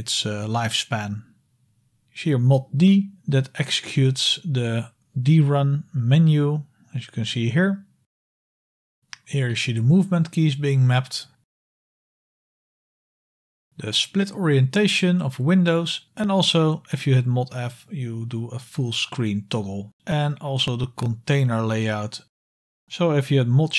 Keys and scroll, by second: 19.1 super+f, 20.0 super+f.